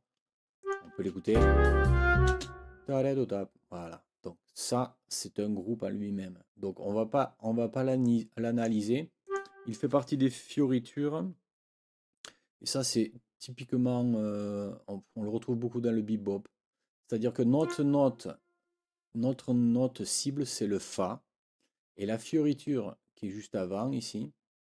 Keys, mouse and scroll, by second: 0.6 click, 1.3 space, 2.3 space, 8.0 click, 9.2 click, 17.5 click.